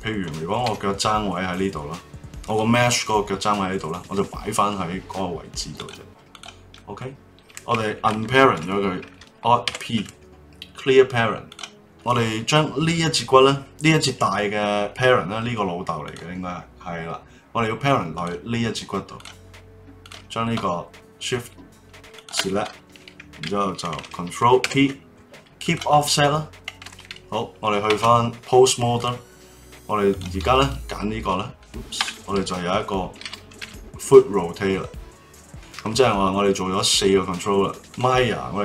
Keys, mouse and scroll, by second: 0.6 g, 4.7-5.7 middle drag, 5.7 click, 6.3 click, 6.7 middle click, 7.4 click, 9.7 alt+p, 11.8-12.9 middle drag, 16.0 click, 18.1 click, 19.1 click, 20.0 click, 22.1 shift+click, 24.6 ctrl+p, 27.9 ctrl+Tab, 28.3-29.0 drag, 30.1 click, 30.6 alt+middle click, 31.9 KP_3, 33.6 r, 36.2-38.1 middle drag.